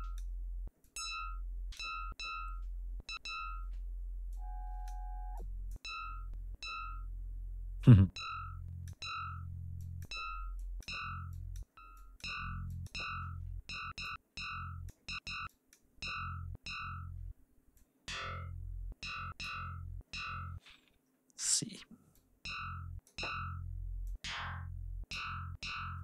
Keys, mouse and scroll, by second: 0.7 click, 4.2 click, 5.3 click, 7.8-9.1 drag, 9.8 click, 10.6 click, 11.3 click, 12.0 click, 12.7 click, 14.0 click, 15.5 click, 17.8-19.6 drag, 22.1 click, 24.1-25.3 drag.